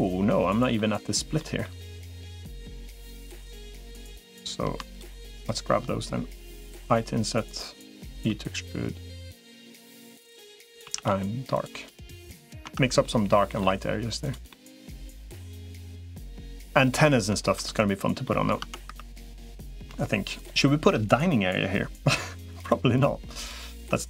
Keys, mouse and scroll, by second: 1.2 middle click, 2.5 middle click, 3.3 click, 6.7 i, 7.9 e, 10.7 a, 10.9 g, 12.5 Tab, 12.8 middle click, 14.3 middle click, 15.9 middle click, 17.1 Tab, 17.3 Tab, 18.0 middle click, 18.5 Tab, 18.7 3, 19.2 middle click, 22.7 shift+click.